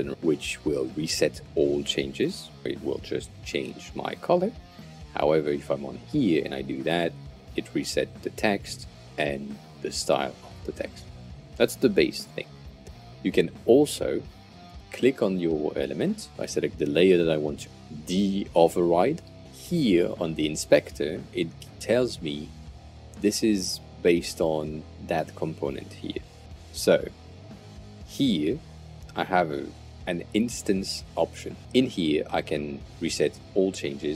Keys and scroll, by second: 4.4 super+z, 12.0 super+z.